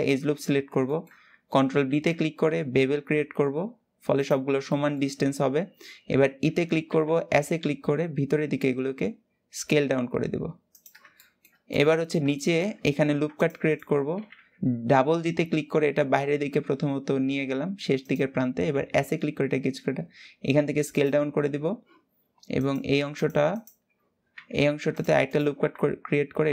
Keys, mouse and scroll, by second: 0.6-1.6 shift+middle drag, 1.6 ctrl+b, 4.4 shift+middle click, 4.9-5.5 scroll up 1, 6.1 e, 10.9-12.7 shift+middle drag, 12.7 ctrl+r, 13.8 g, 22.3 click, 22.8 alt+shift+click, 23.2 alt+shift+click, 24.3 ctrl+r, 25.4 s.